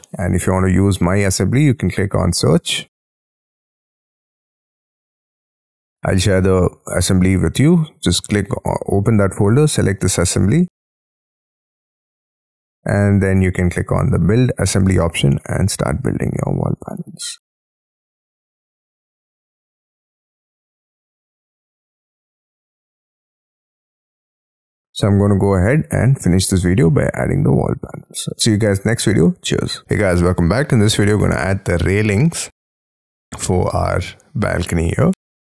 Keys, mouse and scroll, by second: 19.3-20.2 scroll up 18, 20.2 middle click, 20.6-21.5 scroll down 12, 21.5-22.2 scroll up 21, 22.3 middle click, 24.0-26.1 scroll down 55, 26.6 middle click, 29.8 middle click, 31.1-32.1 scroll up 5, 32.1-34.3 scroll down 4.